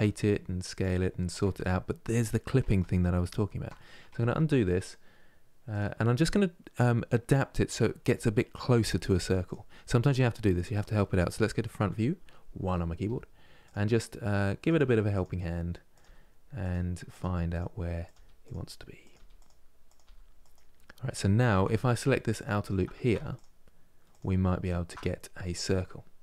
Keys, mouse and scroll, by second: 2.4 ctrl+z, 3.0 ctrl+z, 5.4-8.4 drag, 9.1-10.5 drag, 10.5-11.5 middle drag, 11.5 KP_1, 12.7 g, 14.3 click, 14.4 g, 15.6 click, 15.7 g, 16.8 click, 16.9 g, 17.7 click, 17.8 g, 18.7 click, 18.9 g, 19.6 click, 19.7 g, 22.1-26.0 alt+drag, 26.0-26.2 middle drag.